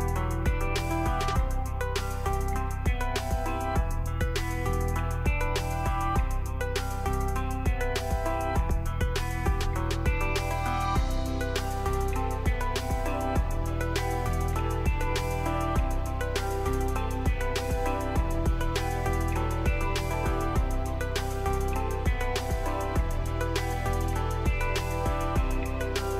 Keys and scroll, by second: 0.0 m, 1.3-2.4 typing, 8.6-10.1 typing, 11.8-13.5 typing.